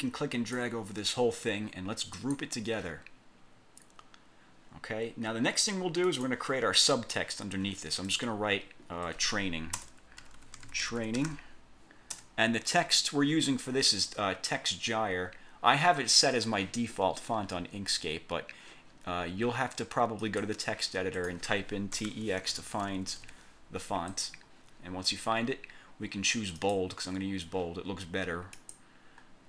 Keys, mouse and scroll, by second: 2.3 click, 4.8-5.6 scroll down 2, 6.2 click, 8.2 click, 9.9 Caps_Lock, 10.1-11.9 typing, 12.2 Caps_Lock, 20.3 click, 21.3 click, 21.8-23.1 typing, 24.2 click, 26.7 click, 28.6 click.